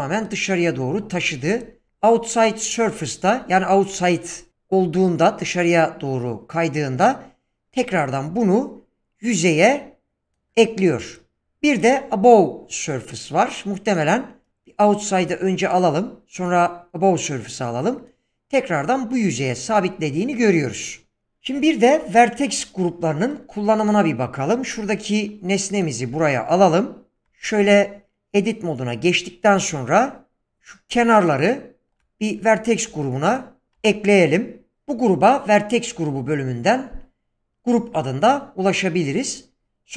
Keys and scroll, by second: 24.8 g, 26.1 s, 27.2 Tab, 29.5 1, 33.7 ctrl+v, 39.1 Tab.